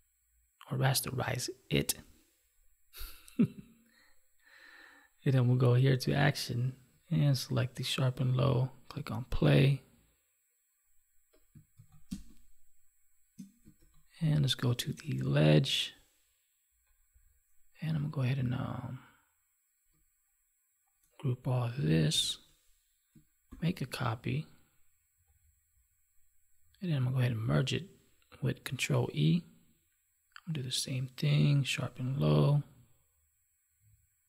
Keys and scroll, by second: 11.7 ctrl+s, 12.1 space, 13.7 ctrl+s, 22.1 ctrl+g, 23.5 ctrl+j, 27.4 ctrl+e.